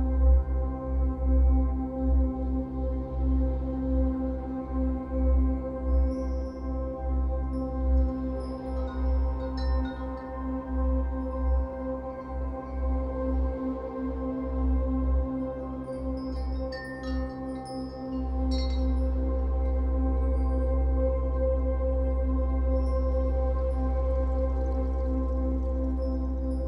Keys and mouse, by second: 1.1-1.5 typing, 3.1 click, 5.8 s, 7.7 shift+click, 8.9 g, 9.5 z, 11.1 click, 12.0-12.4 typing, 14.6 click, 16.7 ctrl+alt+click, 17.4 alt+shift+click, 17.8 ctrl+alt+click, 19.0-21.6 drag, 21.8 click, 22.3 click, 25.3 click.